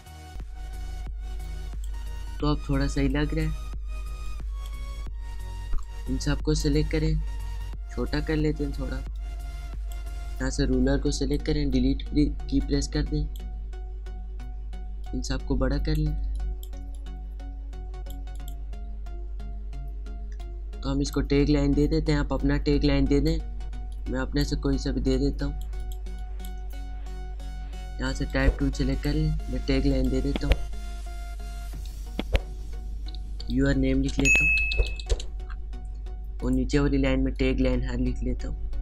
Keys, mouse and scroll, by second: 0.1 space, 0.1 click, 0.2 space, 1.4 click, 1.7 space, 2.9-7.0 drag, 7.0 alt+scroll down 1, 9.1-15.0 alt+shift+drag, 15.0 alt+shift+click, 16.2 space, 16.3-18.3 drag, 20.4-21.9 drag, 21.9-25.1 alt+shift+drag, 25.1 alt+shift+click, 26.0 space, 26.2 click, 28.3 right click, 28.9 click, 34.1-35.3 typing, 34.6 Num_Lock, 36.4 click, 37.6 alt+click, 38.3 alt+shift+click.